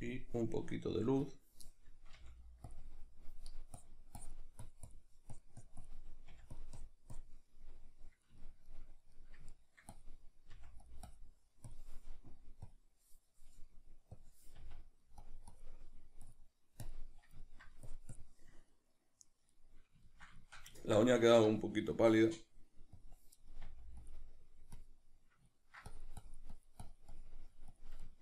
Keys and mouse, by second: 2.2 f, 2.8 click, 6.3 click, 6.3 f, 7.6-9.9 middle drag, 9.9 click, 10.5 f, 14.6 f, 15.3 click, 17.4 ctrl+middle click, 17.9 click, 18.8-23.6 middle drag, 23.6 f, 24.1 click, 25.5 ctrl+middle click, 25.9-28.1 drag, 28.1-28.2 ctrl+middle drag.